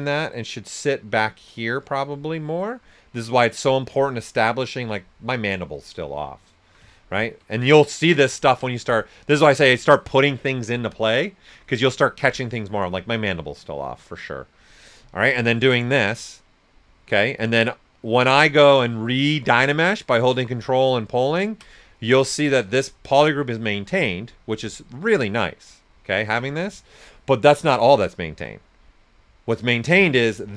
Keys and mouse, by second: 6.2 click, 6.3 alt+right click, 8.4 ctrl+right click, 15.2 shift+click, 16.0 shift+q, 18.0 ctrl+click, 20.8-24.2 ctrl+drag, 25.0 right click, 26.3 x, 27.3 click, 27.8 right click, 28.2 s, 28.3-29.9 drag, 29.9-30.5 shift+drag.